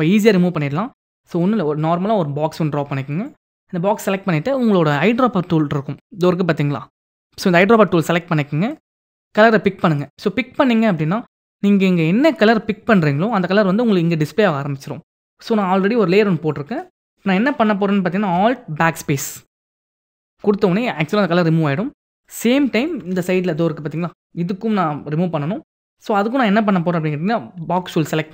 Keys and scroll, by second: 18.4 alt+BackSpace, 22.5 ctrl+d, 28.1 m.